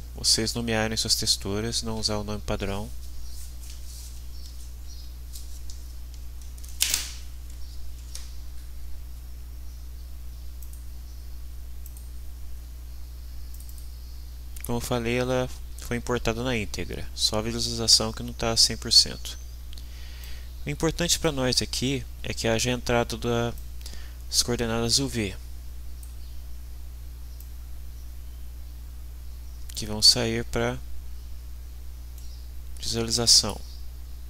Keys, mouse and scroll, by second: 10.6 click, 11.8 click, 13.5 click, 20.2-21.4 drag, 23.5-26.2 drag, 27.4-30.1 drag, 32.2-33.7 middle drag.